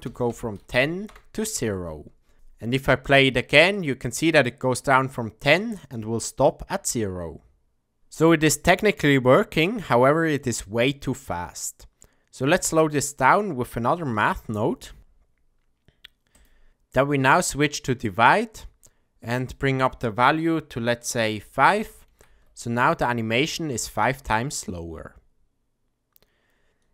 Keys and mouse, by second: 2.3 shift+Left, 2.3 space, 3.7 click, 11.3 middle click, 12.6 click, 14.1 shift+a, 17.4-18.3 drag, 19.4-22.8 drag, 22.0 shift+Left, 23.7 space.